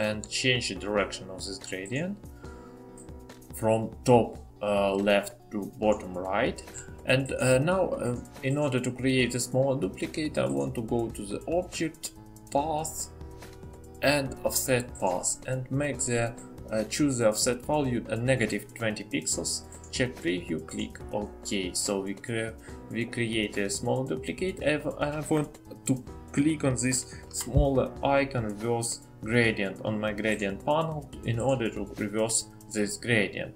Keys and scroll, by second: 18.9 typing.